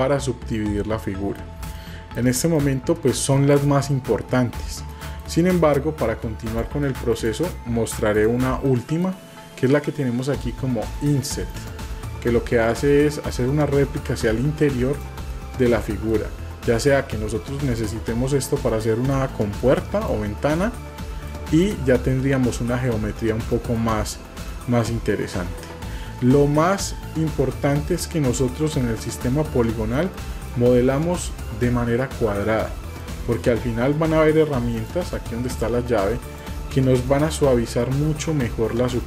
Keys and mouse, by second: 1.9 shift+middle click, 2.6 middle click, 5.1 middle click, 7.1 click, 8.8 middle click, 8.8 typing, 11.6 click, 13.3-15.1 drag, 15.1 typing, 15.4 middle click, 17.8 click, 19.1-20.1 drag, 20.4 middle click, 21.6 click, 22.1-23.3 middle drag, 23.7 shift+middle click, 24.6-25.7 middle drag, 27.2 Tab, 27.8-29.9 middle drag, 30.2-30.5 shift+middle drag, 33.0 middle click, 36.2-39.0 drag.